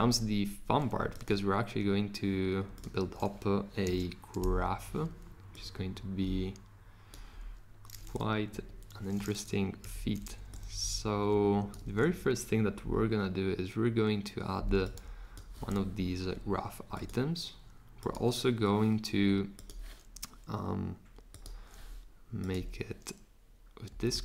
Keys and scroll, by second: 3.8 r, 8.5 Escape, 9.8 v, 24.1 super+z.